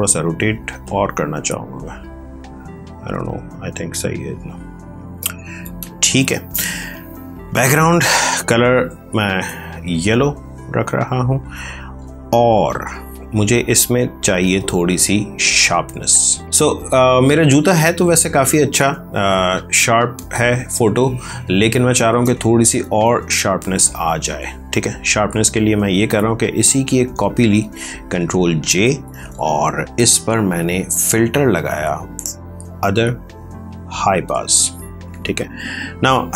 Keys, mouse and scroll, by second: 0.4 ctrl+t, 1.0 click, 7.2 click, 9.2 alt+BackSpace, 13.0 ctrl+click, 16.5 space, 17.3 ctrl+click, 20.1 ctrl+click, 26.4 ctrl+j, 30.5 click, 34.2 click.